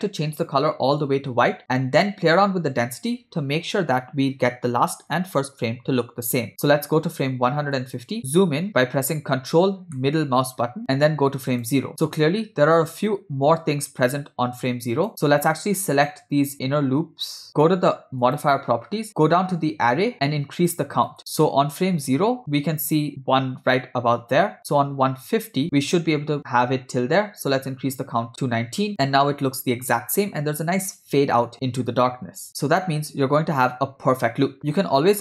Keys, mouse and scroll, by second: 8.0 click, 8.2 middle click, 8.7 KP_0, 10.1-10.8 ctrl+middle drag, 11.5 click, 15.1 click, 16.1 click, 18.4 click, 19.2 click, 20.7 click, 22.2 click, 25.5 click, 28.3 click, 32.5-33.7 ctrl+middle drag.